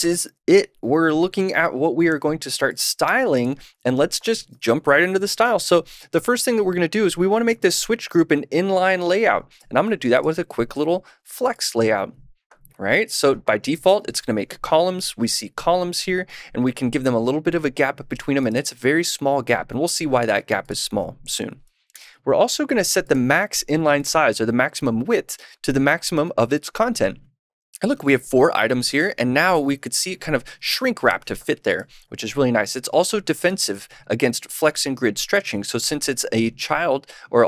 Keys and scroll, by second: 9.7 super+/, 11.2 super+s, 21.9 super+/, 23.2 super+s.